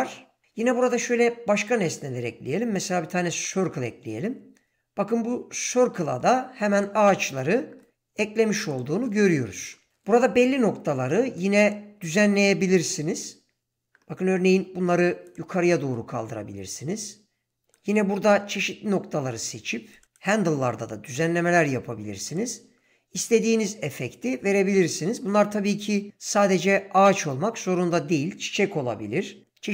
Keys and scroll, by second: 0.7 shift+a, 3.3 s, 7.7 g, 13.0 g, 18.7 g, 21.1 g.